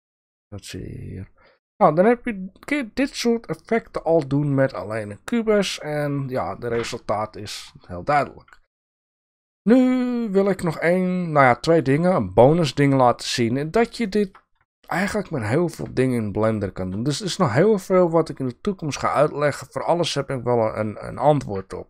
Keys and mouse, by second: 3.8 click, 10.4-11.1 drag, 11.6 shift+drag, 12.9-14.2 drag, 14.7 shift+drag, 14.8 shift+middle click, 15.9 click, 20.2-20.6 middle drag, 21.1 shift+drag, 21.2 shift+middle click.